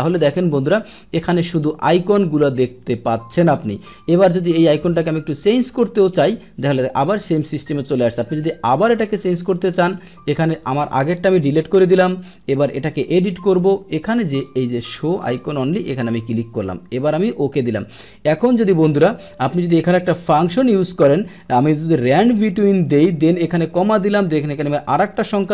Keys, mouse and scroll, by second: 2.1 click, 6.0 click, 7.7 click, 8.7 click, 10.6 click, 11.4 Delete, 11.4 click, 12.1 Delete, 12.9 click, 14.4 click, 15.7 click, 17.3 click, 21.8 Down, 22.5 Tab, 22.5 Down, 22.7 Tab.